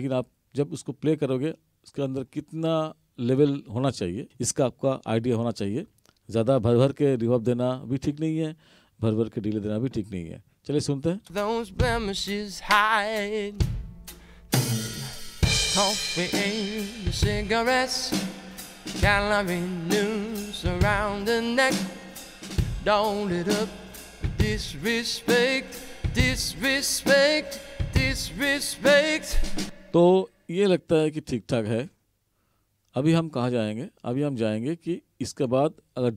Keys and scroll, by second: 11.2 space, 29.7 space.